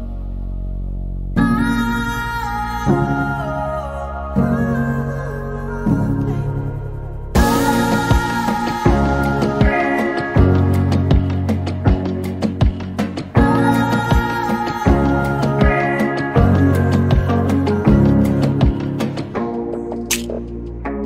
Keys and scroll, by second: 3.6 t, 6.4-7.4 typing, 10.1-10.9 typing, 12.1 typing, 13.9-15.5 typing, 17.9-18.7 typing, 20.7 e.